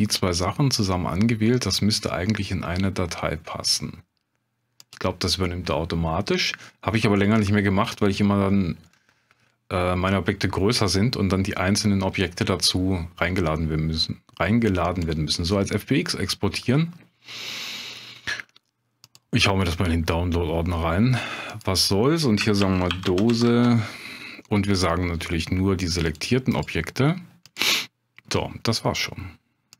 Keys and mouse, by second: 4.8-15.1 drag.